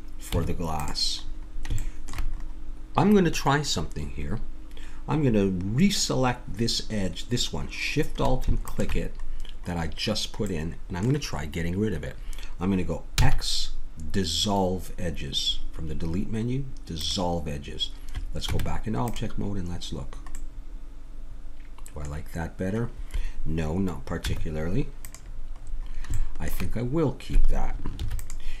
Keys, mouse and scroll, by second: 0.3 Tab, 3.8 middle click, 8.6-10.4 drag, 10.4-11.9 middle drag, 13.2 x, 18.5 Tab, 19.9-21.3 middle drag, 21.6 middle click, 24.2 Tab, 25.7 middle click, 28.0 ctrl+r.